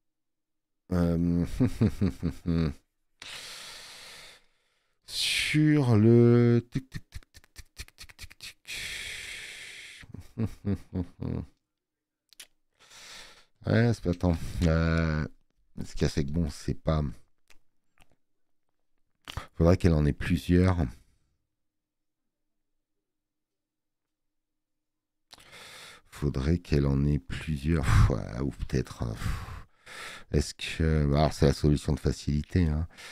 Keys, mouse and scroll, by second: 10.6 alt+scroll, 13.5 space, 13.6 click, 28.4 space, 28.5 click.